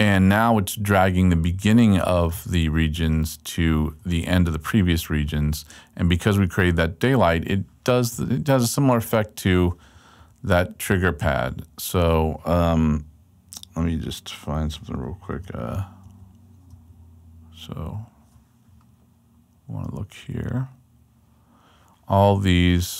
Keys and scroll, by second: 4.2 super+Right, 5.2 super+Left, 10.2 super+Right, 11.0 super+Left, 16.0 super+`, 16.7 super+`, 16.7 super+Right, 18.6 super+Left.